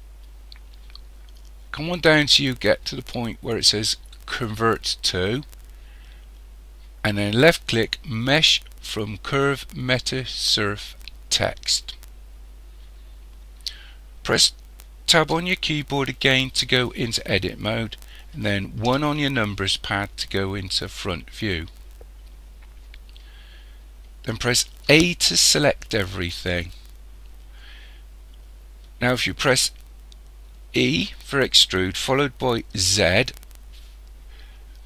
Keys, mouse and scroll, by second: 15.3 Tab, 18.8 KP_1, 21.1-24.6 scroll up 2, 24.9 a, 30.8 e.